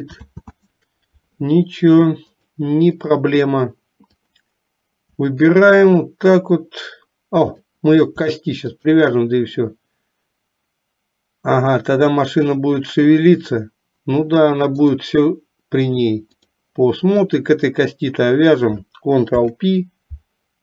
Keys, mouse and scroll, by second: 0.4 ctrl+z, 2.5 click, 5.8 shift+click, 7.5 click, 15.2-16.6 drag, 19.4 ctrl+p.